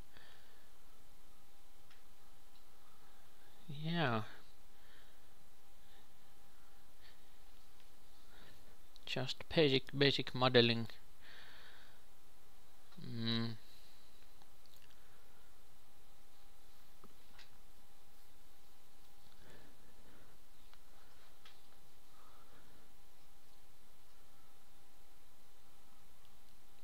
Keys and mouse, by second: 2.7 Tab, 5.4-6.5 drag, 5.4 shift+s, 5.4 shift+a, 5.4 shift+a, 6.5 shift+a, 7.0 s, 7.3 s, 8.1 Tab, 8.5 KP_3, 8.7 click, 9.5 d, 9.6 e, 11.0 s, 11.9 g, 13.7 ctrl+r, 15.7 KP_3, 16.0-18.0 drag, 16.7 e, 18.3 a, 19.3 ctrl+b, 23.4 Tab, 24.3 ctrl+shift+KP_2, 24.5 ctrl+shift+KP_3.